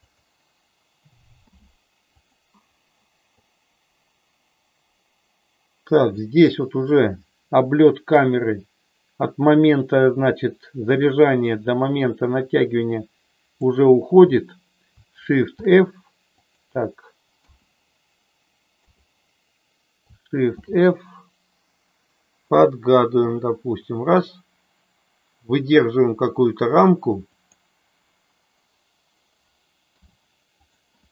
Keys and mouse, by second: 0.0 click, 1.4 i, 3.5-6.2 drag, 8.2-13.7 drag, 15.5 shift+f, 17.4 KP_0, 18.7 KP_0, 20.5 shift+f, 27.4 click, 29.8 i.